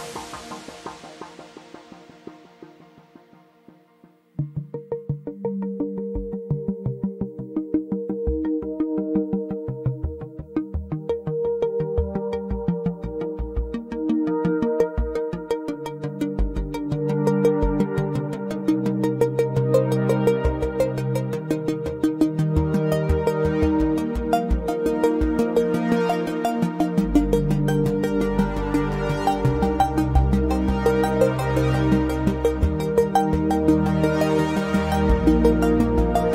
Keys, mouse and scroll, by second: 1.2 alt+middle click, 1.6 alt+click, 1.9 scroll up 1, 3.2 alt+click, 3.7 ctrl+z, 4.0 click, 7.7 scroll down 1, 7.8 scroll up 1, 8.0 scroll down 1, 8.6 alt+click, 10.2 click, 10.8 alt+middle click, 11.4 alt+click, 13.4 scroll up 1, 14.0 click, 14.4 alt+middle click, 14.7 alt+click, 15.2 right click, 16.0 click, 16.4 double click, 17.6 click, 18.5 scroll down 1, 18.7 alt+click, 20.4 alt+middle click, 20.7 scroll up 1, 21.6 click, 23.2 alt+middle click, 23.6 alt+click, 33.2 click, 33.6 double click, 34.0 right click, 34.4 click, 34.8 scroll down 1, 35.0 scroll up 1, 35.1 scroll down 1, 35.4 alt+click.